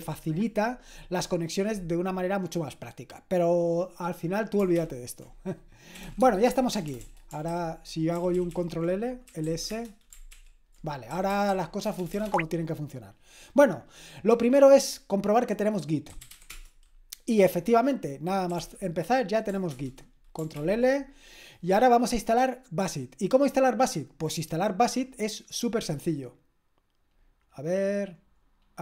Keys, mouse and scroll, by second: 4.7 ctrl+l, 5.7-6.8 typing, 7.5 ctrl+l, 8.2 ctrl+l, 8.3 ctrl+l, 8.6 ctrl+l, 9.0-10.0 typing, 10.3 ctrl+l, 11.1-12.2 typing, 15.8-16.8 typing, 18.2-19.1 typing, 19.7 ctrl+Return, 20.6 ctrl+l, 25.6-27.0 scroll up 1, 27.0-28.1 scroll down 1, 28.1-28.8 scroll down 1.